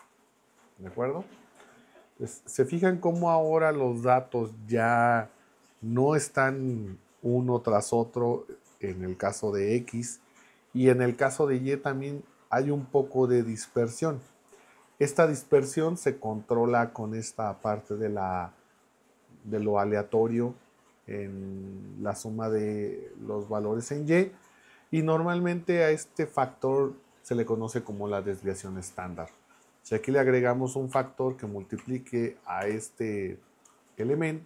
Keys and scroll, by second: 30.9 2, 32.6 shift+8.